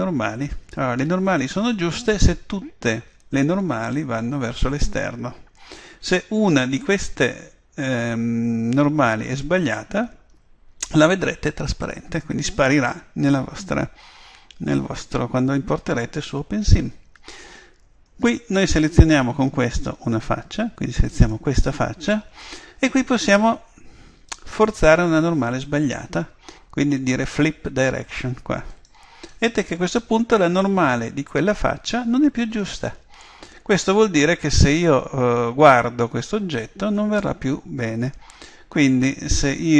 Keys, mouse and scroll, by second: 3.6-9.0 middle drag, 19.6 click, 21.2-23.0 right drag, 28.7 click, 29.9-33.6 middle drag, 34.9 middle click, 39.2-39.7 scroll down 1.